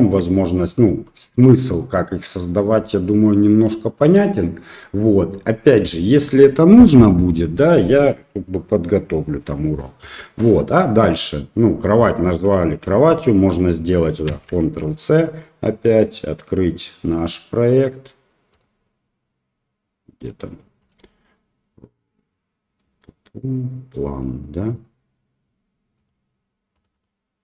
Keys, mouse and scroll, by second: 10.5 middle click, 14.3 ctrl+c.